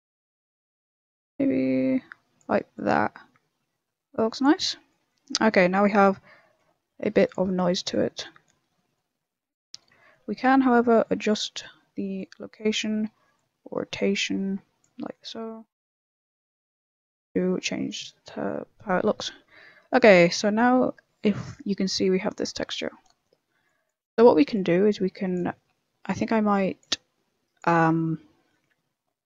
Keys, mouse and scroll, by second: 0.8 click, 4.7 click, 4.7 middle click, 5.0 middle click, 5.7 middle click, 5.7 scroll down 2, 5.9 middle click, 6.9 g, 7.4 middle click, 7.7 shift+middle click, 7.8 shift+middle click, 8.0 middle click, 8.3-8.7 scroll up 4, 8.7 middle click, 9.1 scroll down 4, 9.3 middle click, 9.7 middle click, 9.9 shift+middle click, 10.0 middle click, 10.0 shift+middle click, 10.2-10.7 shift+scroll up 4, 10.3 middle click, 10.8 middle click, 11.4 middle click, 12.1 click, 13.3 click, 14.9 middle click, 15.6 shift+middle click, 15.9 scroll up 2, 15.9 middle click, 16.4 middle click, 16.5 shift+middle click, 16.8 scroll up 3, 17.0 middle click, 17.3-17.7 scroll down 5, 17.7 middle click, 18.0 shift+middle click, 18.1 shift+middle click, 18.4 middle click, 18.8 shift+middle click, 19.9 middle click, 20.4 z, 20.8 middle click, 21.4 scroll down 1, 21.5 middle click, 22.5 middle click, 23.6 click, 24.5 click, 25.5 middle click, 26.1 click, 26.9 click, 28.0 middle click, 28.4 middle click.